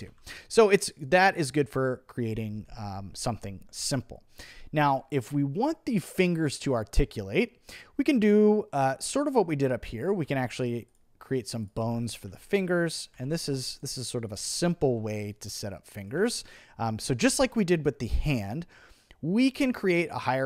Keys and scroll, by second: 10.2 b, 11.8-14.8 typing, 16.2 t.